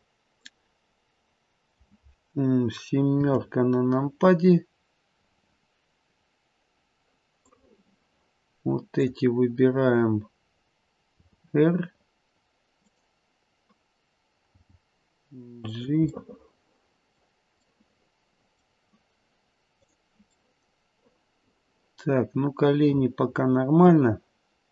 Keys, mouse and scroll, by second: 3.1 KP_7, 7.4 click, 11.1 r, 14.4 g, 16.1 middle click, 16.3 middle click, 16.7 middle click, 16.9 middle click, 17.6 middle click, 18.0 middle click, 19.8 click, 20.3 middle click, 20.7 middle click, 22.1 middle click.